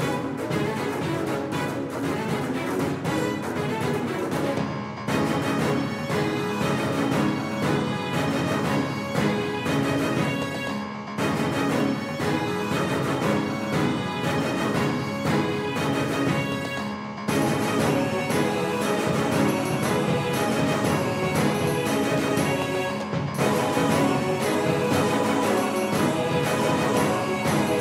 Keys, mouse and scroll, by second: 0.5-3.6 typing, 5.3-6.8 middle drag, 7.9 KP_1, 8.3 KP_3, 9.7-12.5 middle drag, 15.2-18.3 right drag, 16.2-18.3 drag, 18.4-21.2 right drag, 19.2-21.6 drag, 21.2-23.3 middle drag, 24.6 Tab, 26.1 s.